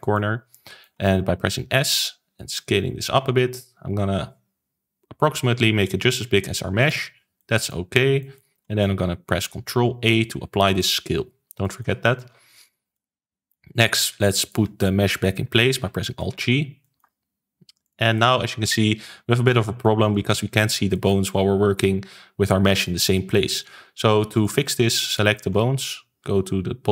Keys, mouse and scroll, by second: 0.1-1.9 shift+middle drag, 1.9 s, 7.3-9.7 shift+middle drag, 9.7 ctrl+a, 11.5 shift+middle click, 12.2 ctrl+s, 12.8-14.3 middle drag, 14.3 click, 16.1 alt+g, 16.7-17.8 shift+middle drag, 17.8 click, 18.1-23.9 middle drag, 24.3 click, 25.0 click.